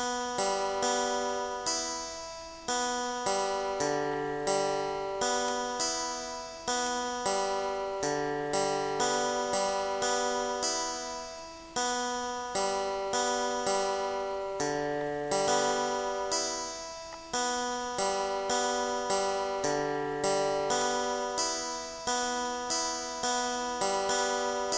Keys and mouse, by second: 4.2 click, 5.5 click, 6.4 click, 7.6 click, 9.8 ctrl+z, 10.8 click, 11.2 click, 13.2 click, 15.0 click, 15.8 click, 17.4 click, 19.6 click, 22.6 click, 23.7 click.